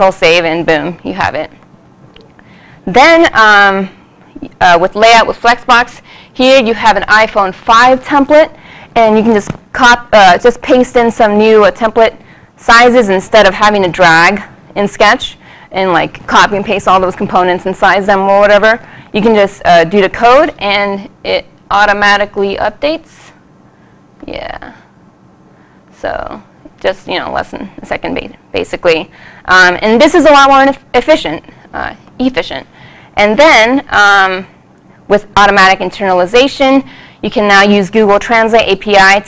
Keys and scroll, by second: 4.6 super+s, 22.6 super+s, 23.2 super+s, 26.5 super+-, 27.6 super+s.